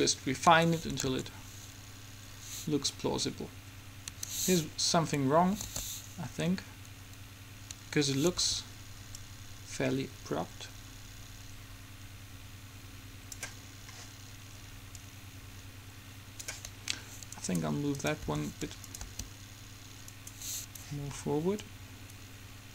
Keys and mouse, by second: 0.7 Escape, 1.2 alt+a, 4.3 Escape, 5.8 alt+a, 7.9 Escape, 13.8-15.0 middle drag, 15.0-16.8 drag, 17.5-19.4 right drag, 18.4 r, 19.2 g, 21.9 click.